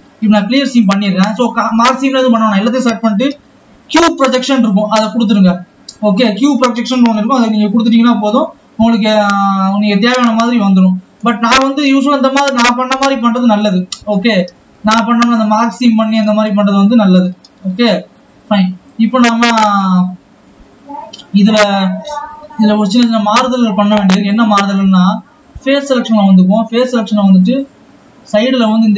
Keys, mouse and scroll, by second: 27.3 click.